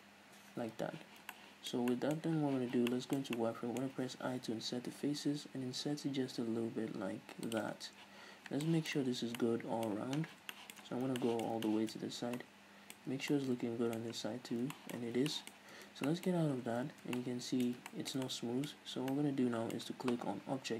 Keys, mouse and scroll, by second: 0.1 click, 0.3 n, 0.7 scroll up 1, 1.2 z, 1.5-3.0 shift+middle drag, 2.4 scroll up 2, 2.7 z, 3.1-4.3 shift+middle drag, 4.7 i, 6.5-7.8 middle drag, 7.8 shift+click, 8.0 scroll down 1, 8.2 z, 8.5 scroll down 1, 8.9-12.0 shift+middle drag, 9.3 scroll down 2, 9.5 Tab, 10.5-11.4 scroll down 4, 12.1-15.2 middle drag, 12.2-12.6 scroll up 1, 13.3 Tab, 14.6-14.9 scroll down 1, 15.3 scroll down 1, 15.5-20.7 shift+middle drag, 15.8 scroll up 1, 16.0 Tab, 16.6 scroll up 1, 17.2 scroll down 1.